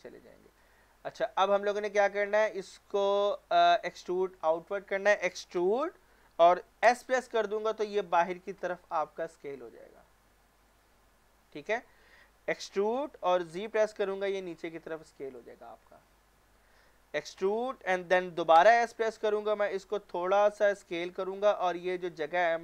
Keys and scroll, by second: 3.2 typing, 5.6 e, 6.8 s, 12.7-13.5 typing, 17.4 typing, 18.5 s.